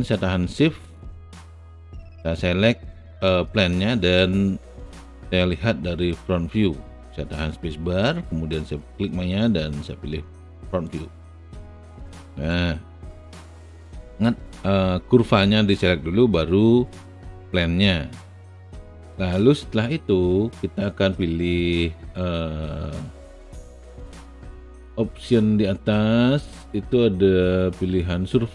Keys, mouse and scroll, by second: 4.1 space, 4.2-11.1 drag, 12.4 alt+right click, 13.0-14.2 alt+middle drag.